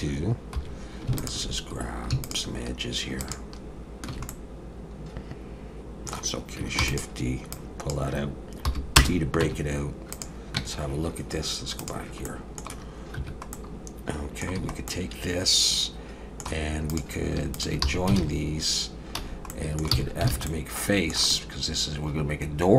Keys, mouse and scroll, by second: 0.6 2, 1.2 alt+shift+click, 2.4 alt+shift+click, 4.3 middle click, 6.8 shift+d, 7.5 click, 8.6 p, 9.4 Tab, 10.1 click, 10.5 Tab, 11.8 click, 12.2 middle click, 13.2 1, 13.5 middle click, 14.5 a, 14.9 middle click, 16.9 click, 17.5 shift+click, 17.8 f, 18.2 alt+a, 19.2 a, 19.5 middle click, 19.9 f, 20.3 alt+a, 20.5 middle click.